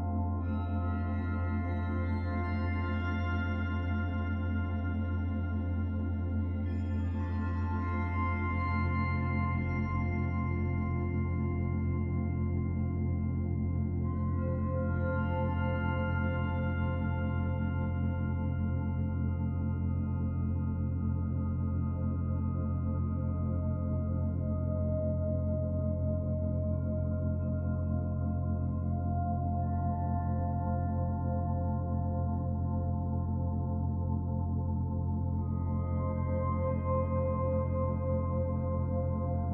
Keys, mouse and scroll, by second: 0.2 click, 2.6 click, 3.9 click, 15.1 middle click, 15.9 Tab, 16.4 middle click, 18.8 click, 23.9-25.0 scroll down 1, 25.0 click, 25.0-26.1 scroll down 3, 31.6 click, 32.8 click, 35.9 click, 37.1 click.